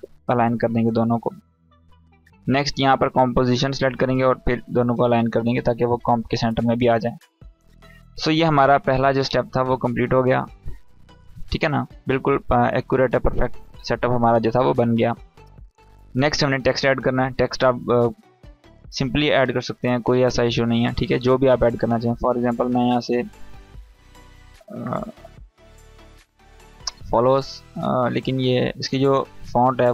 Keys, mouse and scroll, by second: 7.9 click, 12.4 click, 20.3 click, 22.6 f, 23.3 BackSpace, 24.3 Caps_Lock, 24.4-27.1 typing, 28.1-28.8 drag.